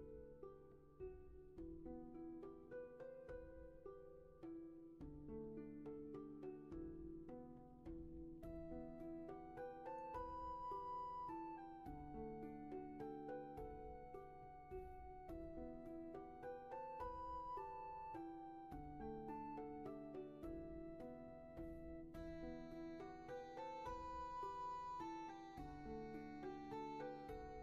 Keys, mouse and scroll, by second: 22.2 ctrl+z.